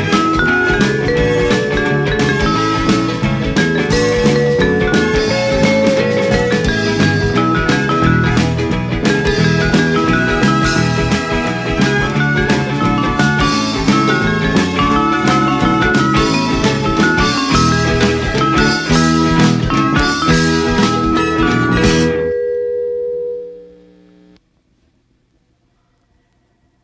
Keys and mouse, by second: 1.1 g, 1.2 z, 5.8 click, 6.6 Tab, 7.8 click, 9.3 Tab, 9.9 shift+middle click, 12.0 a, 13.0 s, 13.2 z, 17.3 right click, 17.8 g, 17.8 z, 19.3 right click, 20.4 Tab, 21.1 click, 21.6 g, 21.8 z, 22.7 click, 23.3 s, 26.3 click.